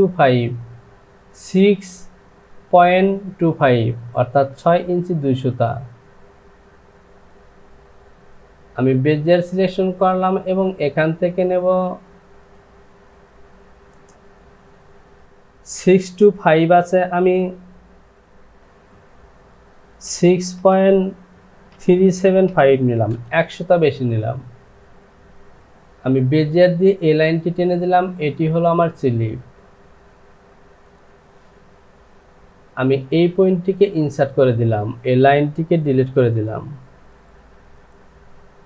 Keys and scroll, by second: 7.3 ctrl+z, 20.1 KP_6, 21.7 KP_3, 22.1 KP_7.